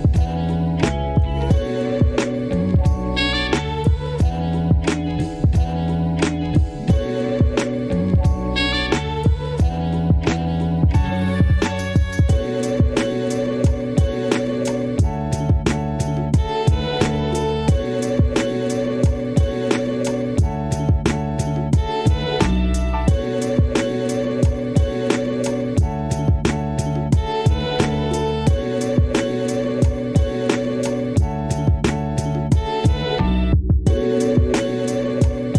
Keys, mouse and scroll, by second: 1.1 Tab, 1.3 ctrl+r, 1.9 s, 2.5 ctrl+r, 3.0 s, 3.8 Left, 4.0 f, 4.2 g, 5.1 ctrl+z, 5.2 ctrl+z, 5.5 g, 6.4 Left, 6.5 g, 7.2 click, 7.6 g, 8.2 click, 8.5 s, 9.7 click, 9.8 g, 11.3-12.3 drag, 12.3-12.7 scroll up 1, 12.7 g, 12.8 g, 13.8 click, 17.9 Tab, 18.0 ctrl+z, 18.4 Tab, 19.4 a, 20.7 right click, 21.2-22.3 drag, 22.3 s, 22.6 s, 23.5 click, 23.8 a, 23.9 s, 25.0 click, 25.0 Tab, 25.4 right click, 25.5 s, 26.1 click, 26.3 scroll up 1, 26.5 s, 27.3 click, 27.5 Tab, 27.6 click, 27.8 g, 29.1 click, 29.2 click, 30.3 click, 30.4 click, 30.9 click, 31.1 click, 31.6 click, 31.8 click, 31.9 click, 32.1 click, 32.4 Tab, 32.8 Tab, 33.0 click, 33.4 click, 33.4 shift+middle click, 33.9 Tab, 34.3 click, 34.5 s, 35.1 g.